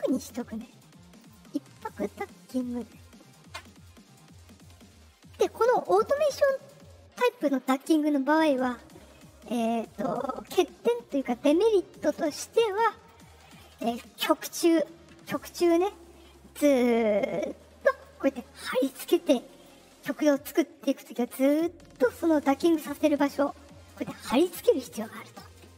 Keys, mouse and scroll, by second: 1.1 click, 13.0 ctrl+click, 18.0-19.6 drag, 19.8-20.2 scroll up 2, 20.9-22.8 drag, 23.2 middle click, 23.7 middle click, 24.3 middle click.